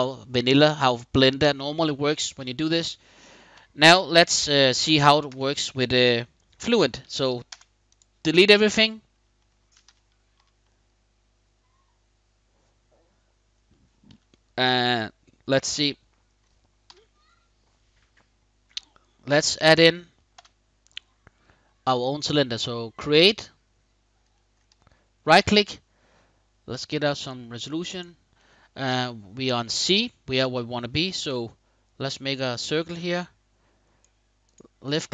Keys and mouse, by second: 0.4-1.0 middle drag, 4.9 a, 7.2 x, 8.0 middle drag, 8.4-8.9 middle drag, 9.1 middle click, 9.6 KP_5, 10.3 KP_5, 10.3-13.3 middle drag, 13.8 KP_1, 14.7 middle click, 16.5 KP_5, 19.0-19.7 middle drag, 20.1 f, 24.1 middle click, 25.2 click, 27.0-27.7 drag, 31.0-33.7 shift+drag, 34.2 shift+click.